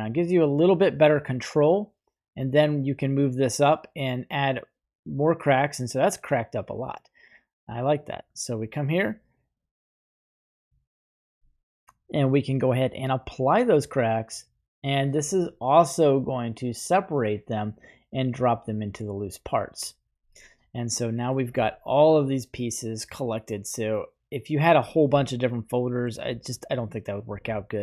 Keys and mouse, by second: 2.3-4.7 drag, 5.5-6.1 middle drag, 8.1 right click, 12.8 click, 18.5 click, 18.6 typing, 19.8-21.2 middle drag, 22.8-26.0 middle drag, 26.2 right click, 26.7 middle drag, 27.2 g.